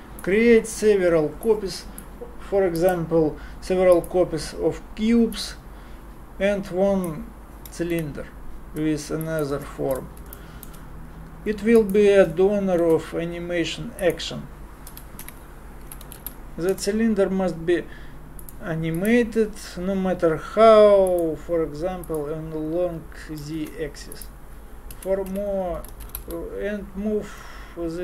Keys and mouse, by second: 5.3-6.9 drag, 9.2 m, 21.1-23.2 middle drag, 23.6 shift+a.